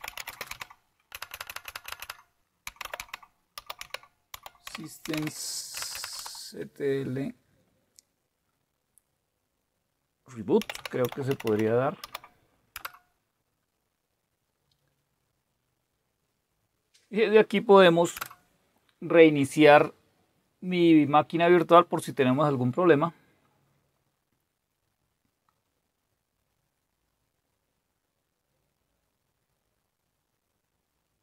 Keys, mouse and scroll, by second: 0.0-5.9 typing, 6.1 Tab, 10.5-12.0 typing, 12.7 Return, 15.0 typing, 18.1 Return.